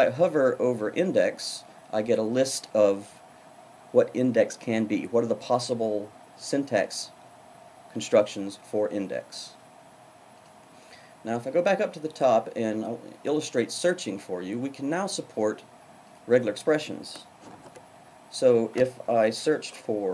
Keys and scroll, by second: 19.5 super+f.